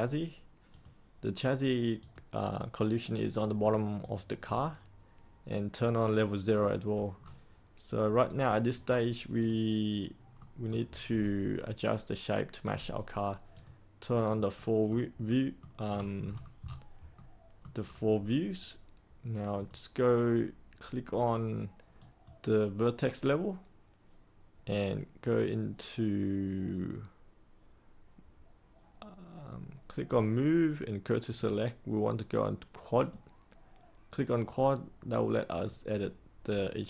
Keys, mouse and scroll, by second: 6.8 scroll up 1, 7.1-8.7 scroll down 1, 8.7 click, 10.3 middle click, 11.2 alt+click, 13.5 click, 14.5 middle click, 15.8-17.1 scroll down 1, 17.1 middle click, 17.7-19.5 scroll down 1, 19.5-23.1 drag.